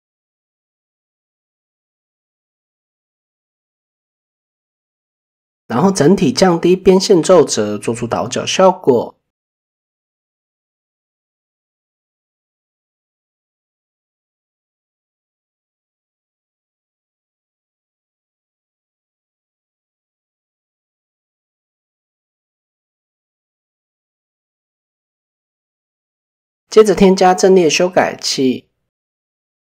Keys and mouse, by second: 0.2 shift+middle click, 0.9 click, 2.1 click, 3.9 Tab, 4.3 a, 6.7 click, 6.9 click, 7.1 click, 7.2 click, 7.4 click, 7.6 click, 7.7 click, 7.9 click, 8.2 Tab, 10.1-11.4 middle drag, 12.5 Tab, 14.2 shift+middle click, 15.6 click, 16.9 click, 17.9 Tab, 18.9 click, 19.3-19.7 middle drag, 22.0-22.5 shift+middle drag, 23.8 shift+middle drag, 27.0 shift+middle click.